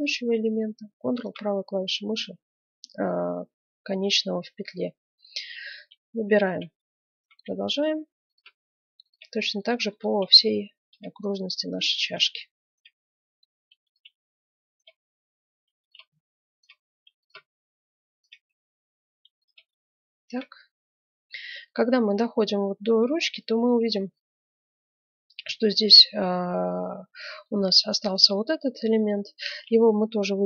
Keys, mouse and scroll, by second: 1.0-2.7 right drag, 4.9 middle click, 6.3 middle click, 6.5 right click, 7.5 middle click, 7.8-10.8 drag, 7.8-8.8 right drag, 10.8 right click, 12.7-19.8 right drag, 13.0-14.6 drag, 15.0-16.8 drag, 18.4-19.8 middle drag, 18.8 click, 20.1 click, 21.4 click, 21.4 right click, 21.9 middle click, 23.3-26.1 middle drag, 29.3 right click, 30.1-30.4 middle drag.